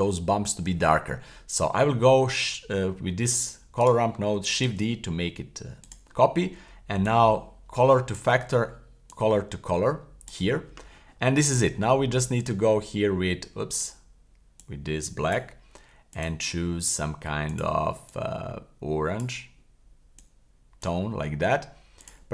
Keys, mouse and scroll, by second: 3.8 right click, 4.7 shift+d, 5.8-6.8 drag, 7.1-8.2 drag, 9.1 click, 9.3 click, 12.5-13.8 drag, 14.6-15.4 drag, 16.1 click.